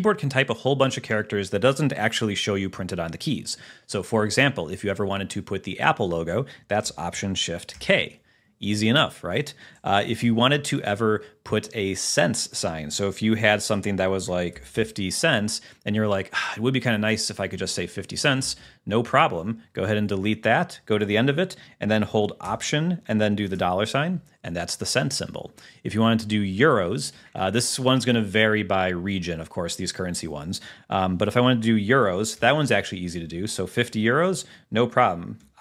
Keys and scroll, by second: 7.8 alt+shift+k, 10.2 BackSpace, 14.3 0, 14.6 ., 18.5 Left, 20.0 Right, 23.6 alt+4, 27.2 Return, 33.1 Left.